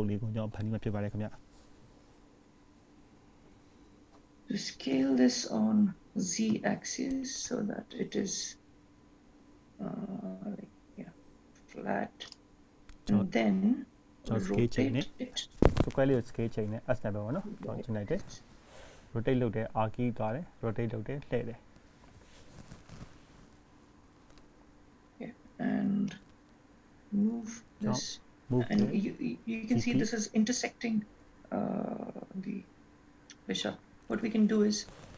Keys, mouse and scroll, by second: 2.4 scroll up 1, 5.3 s, 15.6 r, 21.6-22.6 scroll up 5, 26.7 g.